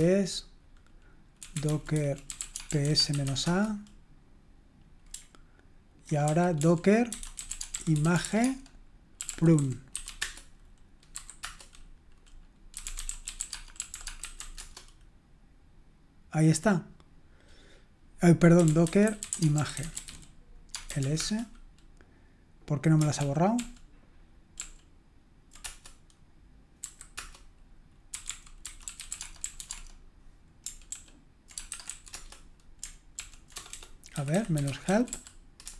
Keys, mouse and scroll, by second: 1.2-3.7 typing, 6.0-11.4 typing, 12.5-14.9 typing, 18.3-21.5 typing, 23.2 ctrl+p, 23.6 ctrl+p, 24.6 ctrl+p, 25.7 Return, 26.8 typing, 27.2 Return, 27.9-30.1 typing, 30.9 ctrl+p, 31.4-35.7 typing.